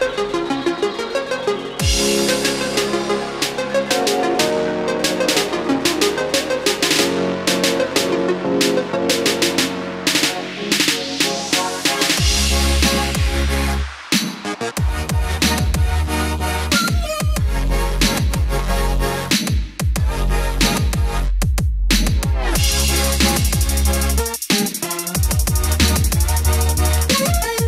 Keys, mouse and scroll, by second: 4.1 KP_2, 6.5-27.6 drag.